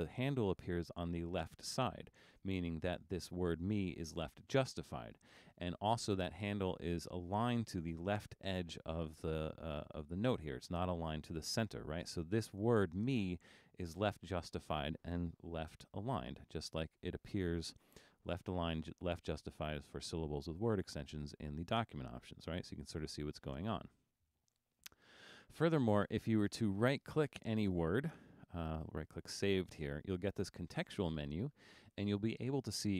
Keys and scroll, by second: 16.6 alt+super+a.